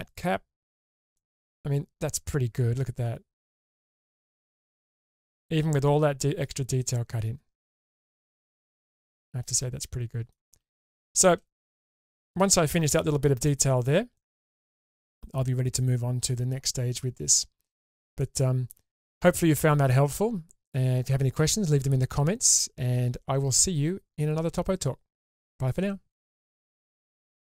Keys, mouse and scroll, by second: 1.2-10.3 middle drag, 10.9 shift+space, 11.5-12.0 scroll down 3, 12.0 middle click, 13.4-13.8 middle drag, 14.2-14.5 shift+middle drag, 14.6-18.0 middle drag, 18.2-18.7 shift+middle drag.